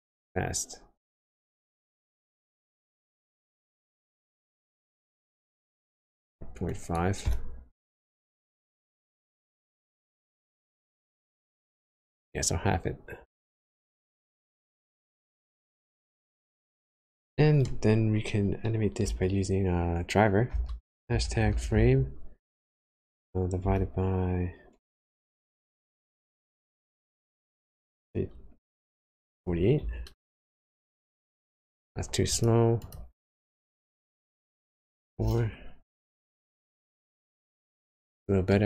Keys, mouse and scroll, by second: 3.0 click, 9.8 click, 16.8 click, 30.9 space, 32.3 click, 33.8 BackSpace, 35.8 space, 38.5 middle click.